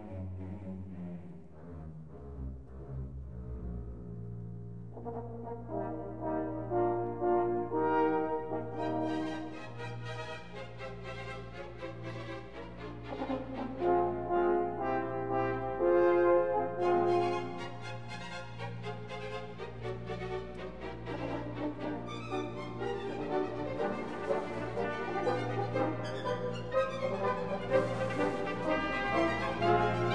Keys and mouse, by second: 2.3 click, 5.3 click, 8.0 click, 8.8 shift+click, 10.6 ctrl+j, 12.2 click, 12.9 shift+click, 13.9 ctrl+j, 14.8 click, 16.9 shift+click, 22.0 click, 24.6 Tab, 25.7 1, 26.9 2.